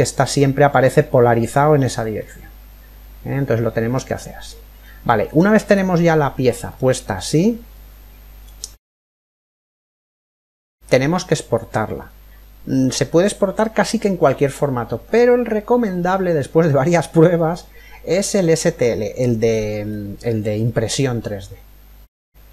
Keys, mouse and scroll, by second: 1.0-3.5 middle drag, 4.4-7.9 middle drag, 5.9-6.3 scroll up 1, 8.2 middle click, 8.3-9.3 scroll down 1, 9.3-10.9 middle drag, 10.9-12.6 scroll up 1, 12.6-13.0 scroll up 1, 13.2-15.0 middle drag, 16.9-18.8 middle drag, 20.5-22.3 middle drag.